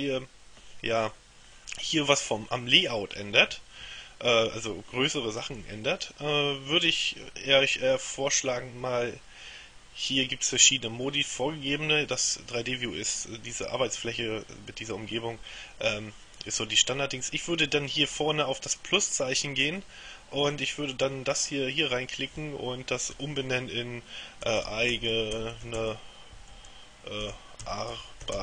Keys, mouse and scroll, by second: 10.7 click, 12.2 click, 19.8 click, 20.6 click, 24.3-28.4 typing.